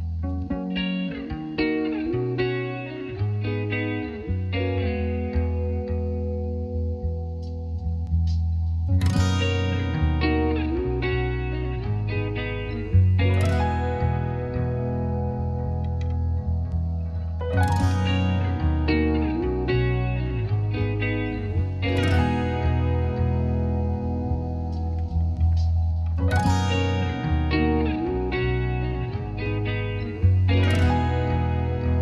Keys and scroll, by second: 6.2 8.